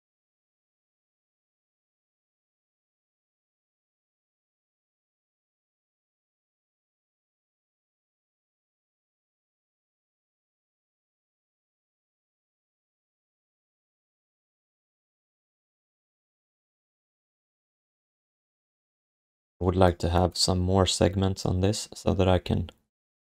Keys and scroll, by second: 1.4 q, 11.1 alt+shift+d, 16.2 BackSpace, 17.0 alt+shift+d, 17.3 ctrl+s.